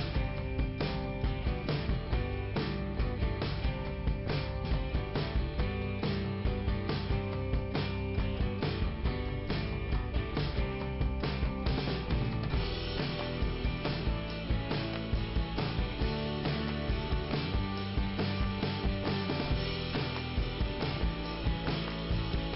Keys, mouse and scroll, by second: 1.7-2.5 scroll up 1, 2.9 click, 4.2 scroll down 1, 6.2 click, 10.7 scroll down 2, 12.5-13.1 scroll up 1, 14.1 click, 15.7 scroll up 2, 16.4 click, 20.3 click, 22.2 click.